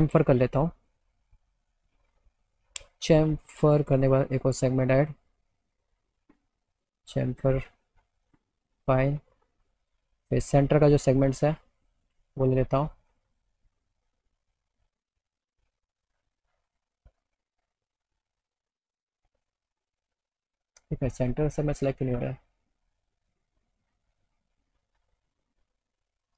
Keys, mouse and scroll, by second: 0.6 click, 4.0 click, 6.2-7.6 drag, 8.3 click, 13.1 click, 13.3 click, 14.4 click, 14.6 click, 15.1 middle click, 18.8 click, 19.9 click, 21.8 click, 24.7 middle click, 26.1 middle click.